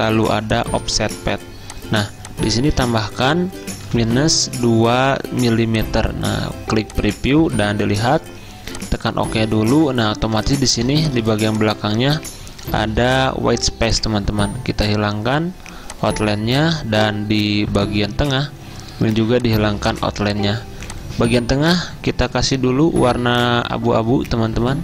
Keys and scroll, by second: 3.6-4.6 typing, 9.4 z, 12.9 v, 22.2 F6, 22.6 F6.